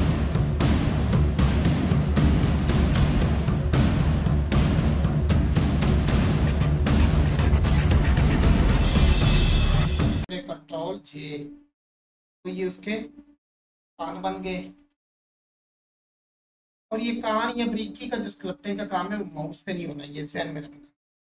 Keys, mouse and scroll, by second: 0.0-1.4 drag, 1.4 scroll up 1, 1.5 alt+click, 2.4 click, 3.7 click, 4.8 click, 5.6 click, 6.3 1, 6.5 click, 7.4 right click, 7.6 click, 8.1 click, 8.2 1, 8.4 click, 8.7 click, 9.3 shift+click, 9.6 shift+click, 10.1 shift+click, 15.2-15.7 scroll up 1, 15.8 alt+click.